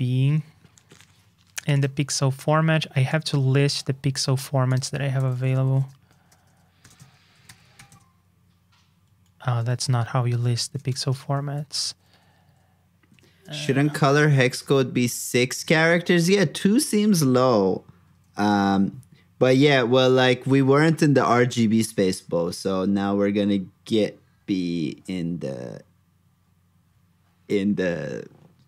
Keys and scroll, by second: 4.2 super+c, 7.4 super+v, 9.7 super+Tab, 10.8 shift+super+], 11.7 super+f, 14.0 super+Up, 16.6 super+Tab.